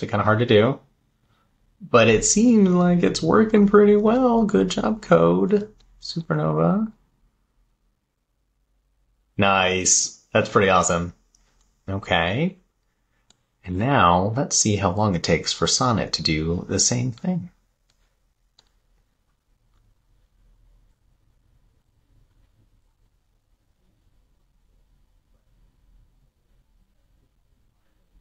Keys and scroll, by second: 0.0 Left, 6.0 Left.